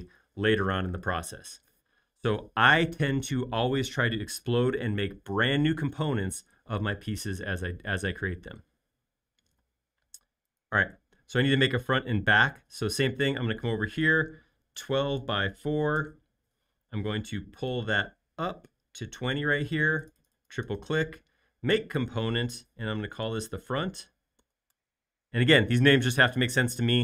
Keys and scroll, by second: 9.5 r, 14.5-17.0 typing, 19.6 space, 22.7-24.3 typing, 24.6 Return.